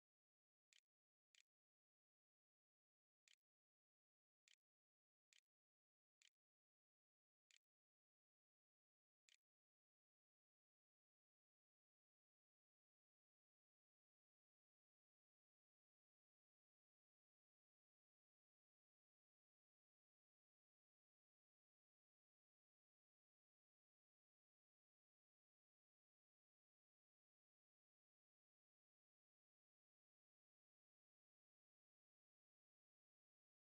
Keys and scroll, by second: 0.0-11.7 typing.